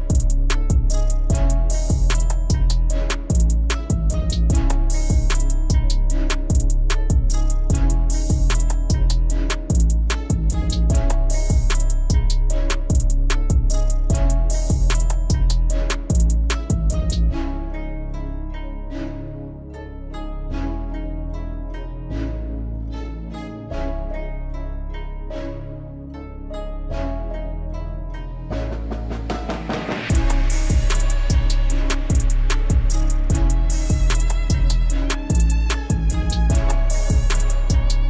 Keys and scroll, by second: 4.6 F4, 22.1 alt+w, 25.1 ctrl+z, 27.7 alt+w.